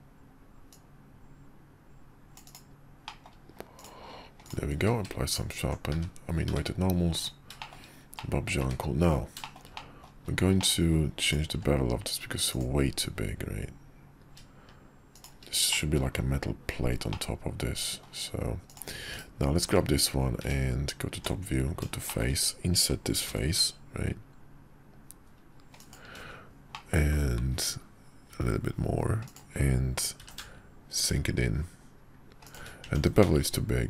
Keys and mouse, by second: 0.7-2.6 drag, 3.1 middle drag, 3.8 drag, 4.5 click, 4.8 q, 5.9 `, 6.5 `, 7.1 click, 7.6 shift+middle drag, 8.2-8.5 middle drag, 8.6 `, 9.4 shift+middle click, 9.7 middle drag, 10.6 middle click, 11.5 q, 15.7 middle click, 17.1-18.0 middle drag, 19.1 /, 19.7 `, 20.4 `, 21.1 Tab, 22.1 shift+middle click, 23.3 i, 26.1 i, 26.7 middle click, 28.3 s, 30.2 e, 32.8 Tab, 33.2 q.